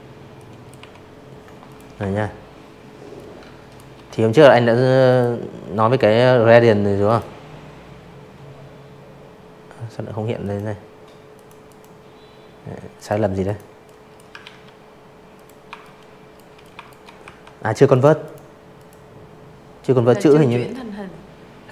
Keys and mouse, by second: 0.1 shift+click, 2.0 click, 4.0 click, 7.3 click, 8.3 click, 8.6 click, 9.9 click, 10.4 click, 10.8 click, 11.4 ctrl+z, 12.3 click, 12.8 shift+click, 13.6 shift+click, 14.1 v, 14.8 click, 15.2 click, 15.7 click, 20.7 click, 21.4 click.